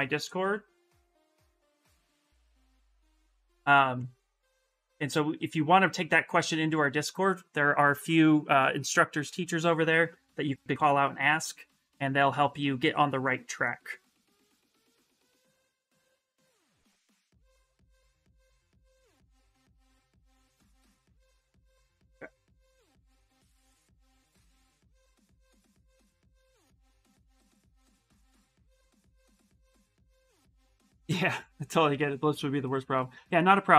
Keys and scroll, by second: 1.9 ctrl+v, 2.6 Return.